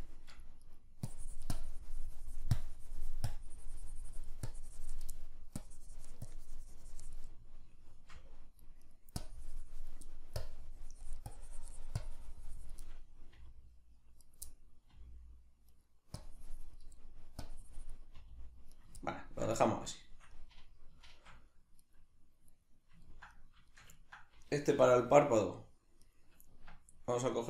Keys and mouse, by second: 0.7 right click, 1.1-5.1 drag, 5.1 middle click, 5.6-7.3 drag, 7.3-8.9 middle drag, 8.9 right click, 9.2 click, 10.1 middle click, 10.4-12.9 drag, 12.9-14.3 middle drag, 13.3 r, 14.3 right click, 14.5-15.8 middle drag, 14.9 r, 15.8 right click, 16.2 click, 17.0 middle click, 17.5-18.9 drag, 18.2 r, 18.9 right click, 19.0-21.8 ctrl+middle drag, 21.8-23.0 right drag, 23.0-26.1 ctrl+middle drag, 24.7 g, 26.1 right click, 26.5 Tab.